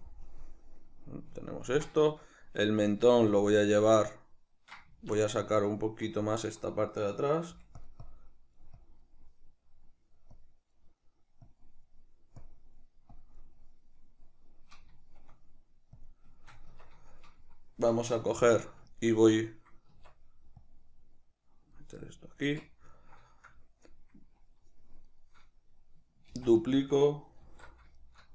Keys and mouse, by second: 0.3 KP_Decimal, 4.9 Tab, 7.5 f, 8.1-9.2 drag, 9.2-10.4 middle drag, 10.4 click, 11.0 middle click, 11.5 click, 12.1 middle click, 12.5-13.6 drag, 13.6-16.0 middle drag, 16.0 click, 16.4-20.6 shift+middle drag, 16.7 Tab, 18.3 alt+q, 19.9 Tab, 20.6-22.0 drag, 22.0-23.0 shift+middle drag, 22.4 Tab, 23.0-25.1 shift+middle drag, 25.1 right click, 26.3 shift+d, 26.7 right click, 27.5 alt+o, 28.0-28.3 shift+middle drag.